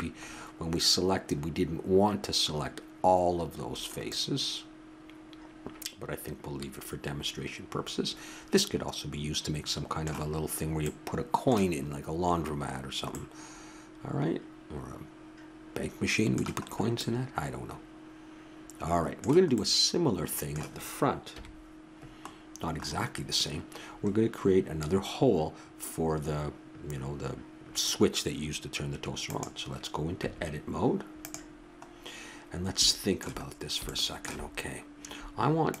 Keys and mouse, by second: 0.2-6.0 middle drag, 10.9-12.5 middle drag, 12.6 middle click, 15.0-16.6 middle drag, 19.0 middle click, 21.3 KP_1, 29.2-31.1 right drag, 30.2 Tab, 34.5-35.8 middle drag.